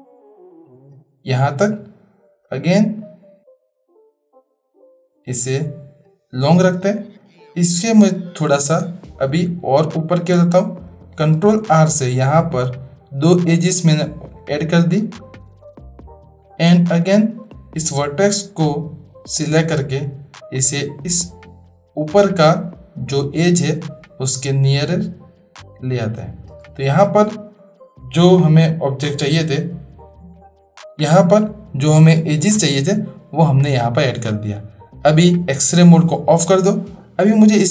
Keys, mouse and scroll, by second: 2.6 click, 3.6-6.0 drag, 6.8-7.2 drag, 8.4 shift+drag, 9.4-10.9 drag, 11.3 ctrl+r, 16.3 shift+drag, 16.4 shift+middle click, 17.1-19.6 drag, 20.4-26.4 drag, 35.1 click.